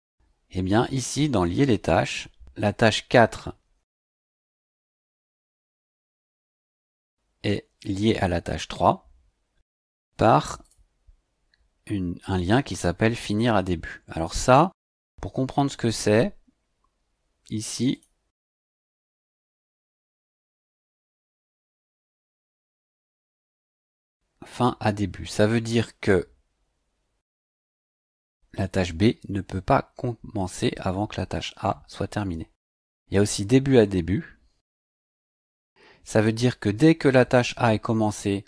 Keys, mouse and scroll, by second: 0.9 click, 9.8 click, 10.6 click, 14.1 click, 17.9 click, 18.9-20.5 scroll down 8, 32.7-34.1 scroll down 2.